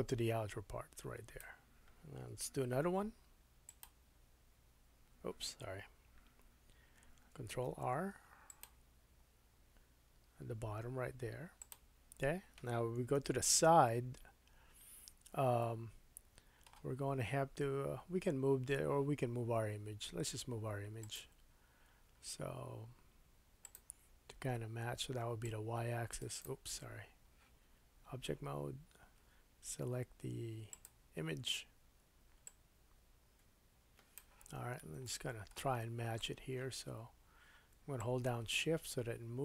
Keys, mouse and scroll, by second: 2.6 shift+r, 3.7 click, 7.7 ctrl+r, 13.2 KP_3, 14.7-15.3 scroll down 3, 15.6 shift+middle click, 21.0 click, 23.6-26.4 drag, 26.4-30.7 middle drag, 27.6 Tab, 30.7 click, 30.8-32.4 middle drag, 32.4-39.4 drag, 34.6-34.9 scroll up 2, 35.1 shift+middle click.